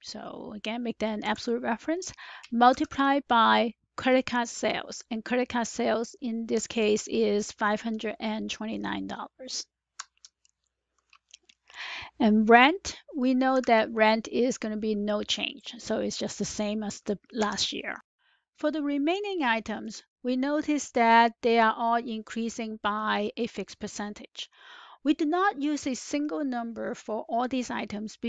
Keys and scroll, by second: 1.2 F4, 2.6 *, 9.9 Return, 13.4 =, 17.3 Return.